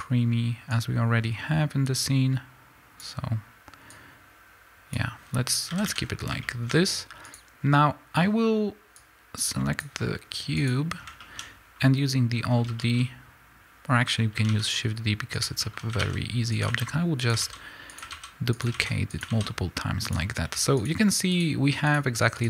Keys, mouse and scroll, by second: 5.7 a, 5.9 scroll up 1, 6.3 middle click, 7.2 click, 10.5 click, 14.5 middle click, 14.5 shift+d, 15.4 click, 16.0-19.3 typing, 16.6 click, 17.2 click, 17.9 click, 18.5 click, 19.1 click, 20.0 click.